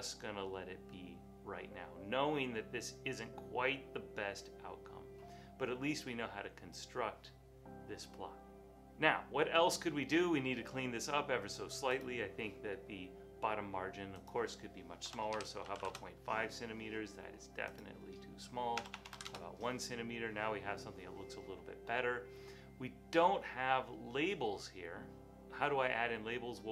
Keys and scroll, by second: 15.1-16.3 typing, 19.0 BackSpace, 19.1 BackSpace, 19.2 1, 19.3 Return.